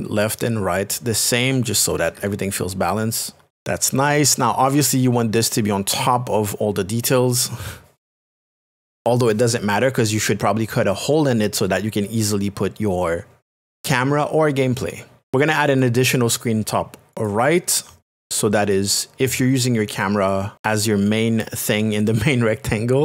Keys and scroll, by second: 2.0 Right, 3.5 Return.